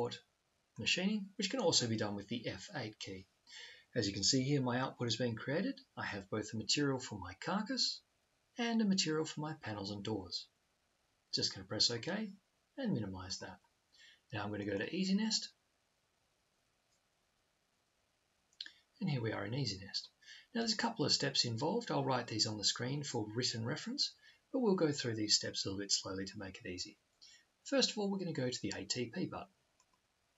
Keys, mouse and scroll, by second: 28.0-29.8 drag.